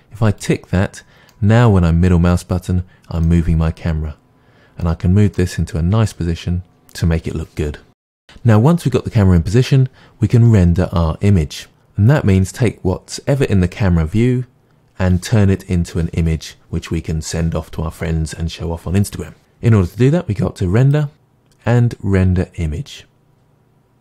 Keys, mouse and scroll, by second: 1.4-7.0 middle drag, 4.3 scroll down 2, 5.8 scroll down 1, 6.8-7.3 scroll up 2, 7.3-7.6 scroll down 2, 7.6-8.2 middle drag, 8.2 ctrl+z.